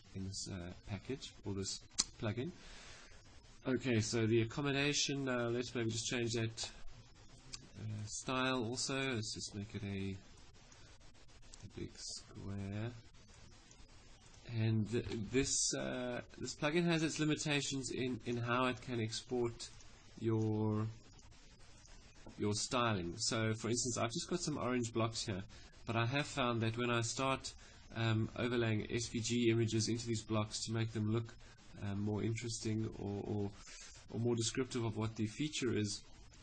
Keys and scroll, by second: 14.7 5.